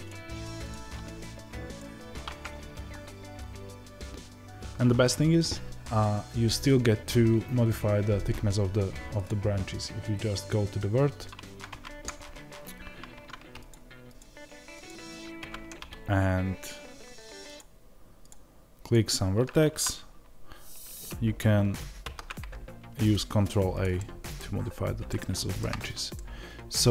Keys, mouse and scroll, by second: 14.1-15.3 drag, 15.3 Tab, 17.5 click, 21.9 ctrl+a, 23.7 click, 23.9-26.9 middle drag, 24.4 scroll up 1, 25.7-26.1 scroll down 1.